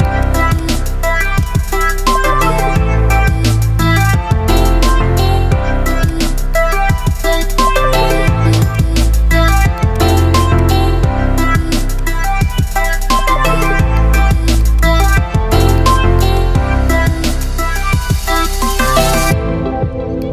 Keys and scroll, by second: 2.8 Delete.